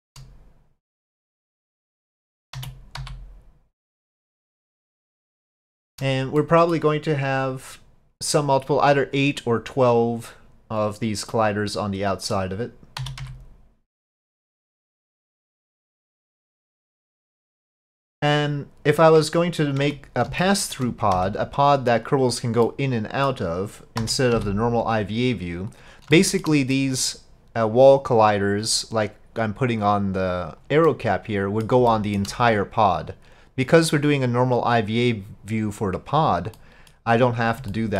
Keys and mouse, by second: 1.0 click, 2.6 s, 4.9-5.4 drag, 5.7-6.0 shift+drag, 6.4-6.8 drag, 11.4-12.3 middle drag, 13.0 s, 15.4-16.7 drag, 16.9 middle click, 19.9 Tab, 20.4 shift+click, 21.2 3, 22.0-23.3 drag, 24.0 s, 26.2 shift+click, 26.8 middle click, 28.6-30.6 drag, 30.9 middle click, 31.9 shift+middle click, 33.1-36.2 drag, 36.6 middle click, 37.8 shift+middle click.